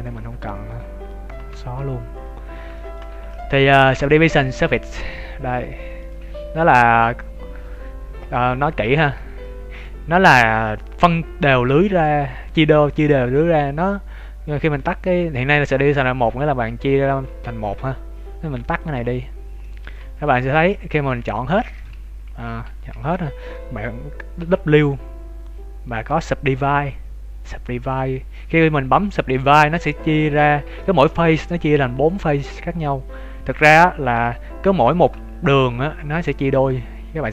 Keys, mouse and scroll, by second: 0.5 right click, 1.4 h, 1.8-2.7 scroll up 5, 2.1 right click, 3.1 ctrl+s, 4.6 click, 8.5 z, 8.9 z, 9.4 middle click, 10.0-11.3 scroll up 3, 11.3 Tab, 11.9 middle click, 17.2 Tab, 17.5 Tab, 18.6 click, 19.3 scroll down 3, 19.6 middle click, 19.9 z, 20.3 ctrl+shift+middle click, 21.1 z, 21.6 shift+middle click, 22.6 a, 22.7 a, 23.1 scroll up 2, 23.5 middle click, 24.3 w, 29.7 middle click, 30.4 z, 30.8 middle click, 33.5 scroll down 1, 34.1 KP_7, 34.5-34.9 scroll up 2, 34.8 shift+middle click.